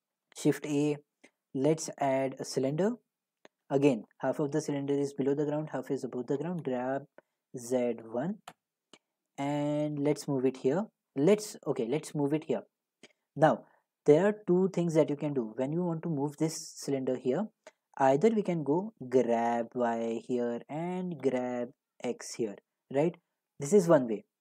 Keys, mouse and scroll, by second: 0.4 a, 2.5 click, 3.7 click, 3.9 click, 4.2 middle click, 4.8-5.6 middle drag, 6.6 g, 7.7 typing, 8.5 Return, 9.6 middle click, 9.7 typing, 9.9 middle click, 13.4-15.1 middle drag, 15.4-17.2 middle drag, 19.0 g, 19.5 y, 20.4 click, 21.2 g, 21.9 g, 22.9 click.